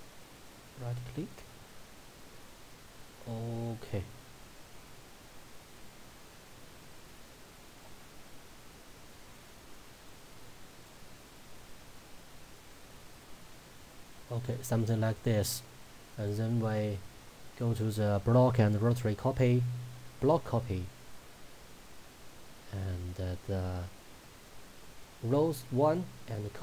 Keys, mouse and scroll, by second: 0.5 right click, 3.1-18.5 drag, 22.7-24.1 scroll down 1, 24.5-26.6 drag.